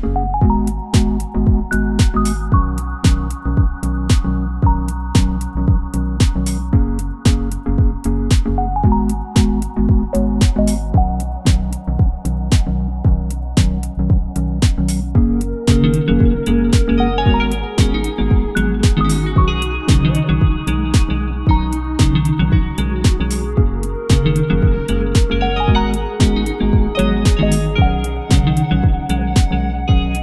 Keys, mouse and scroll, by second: 0.0 middle click, 0.0 scroll up 1, 0.7 scroll down 1, 0.8 middle click, 0.8 scroll up 1, 1.5 middle click, 1.8 middle click, 3.5-4.4 scroll down 3, 3.5 middle click, 4.1 middle click, 4.5 middle click, 6.1 middle click, 9.7 middle click, 10.9 3, 11.8 alt+click, 20.8 alt+click, 24.3 scroll down 1, 24.4 middle click, 26.6 middle click, 27.0 middle click, 29.4 middle click, 29.8 scroll up 1.